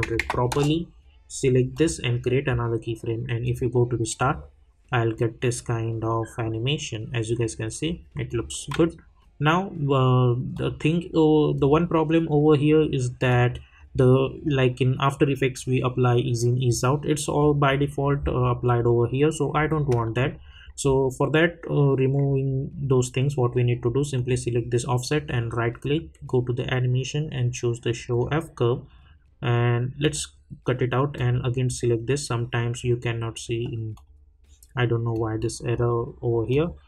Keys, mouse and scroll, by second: 0.5 Return, 1.7 click, 8.2 click, 10.5 click, 17.2 click, 24.1 click, 25.3 right click, 28.1 click, 31.6 right click, 33.9-36.5 drag.